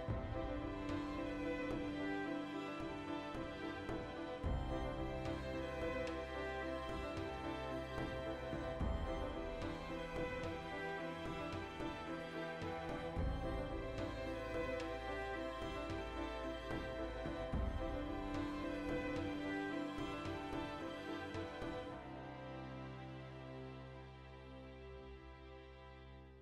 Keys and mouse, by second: 0.6 z, 0.9 Tab, 1.3 right click, 1.6 middle click, 2.4 right click, 2.7 h, 2.9 right click, 3.1 Tab, 3.2-4.6 middle drag, 4.2 3, 4.6 alt+right click, 5.0 alt+shift+right click, 5.2 middle click, 5.6 alt+shift+right click, 5.9-7.0 middle drag, 7.0 shift+right click, 7.3 middle click, 8.1 alt+shift+right click, 8.7 middle click, 9.3 alt+shift+right click, 9.7 ctrl+KP_Add, 10.0 ctrl+KP_Subtract, 11.3-16.2 ctrl+middle drag, 14.0 ctrl+KP_Add, 14.4 alt+o, 15.2 g, 16.2 shift+click, 16.4-26.4 middle drag, 17.4 ctrl+r, 17.8 right click, 17.9 ctrl+r, 18.6 right click, 19.2 Tab, 19.6 alt+h, 20.5 a.